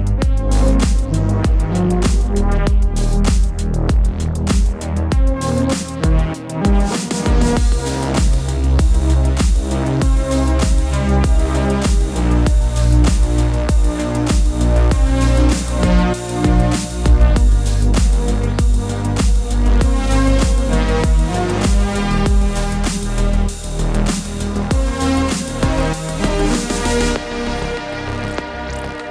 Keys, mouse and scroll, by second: 1.7 click, 2.6 click, 2.9 scroll up 1, 2.9 middle click, 3.4 alt+a, 4.4 click, 5.1 scroll down 1, 5.3-5.8 middle drag, 5.8-6.8 scroll up 1, 6.8 middle click, 7.5 scroll up 1, 7.8 middle click, 8.4 Tab, 8.7-10.7 middle drag, 10.7 /, 11.5-12.7 middle drag, 12.7-13.0 scroll down 2, 13.0-15.6 middle drag, 15.6-16.0 scroll up 1, 16.0-17.8 shift+middle drag, 17.8 click, 19.1-19.6 middle drag, 19.6 Tab, 20.0 scroll down 1, 20.2 middle click, 20.4 alt+a, 20.8-22.3 middle drag, 22.3 click, 22.8 scroll down 2, 23.1-24.8 middle drag, 25.1 click, 25.4 shift+click, 26.5-26.9 drag, 26.9-29.1 middle drag.